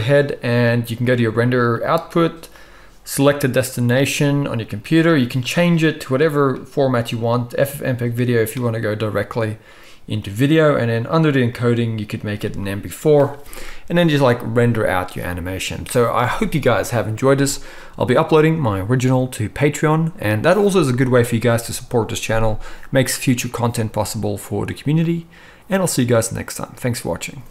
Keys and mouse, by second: 0.0-1.3 drag, 1.3-2.4 middle drag, 2.4-27.5 drag.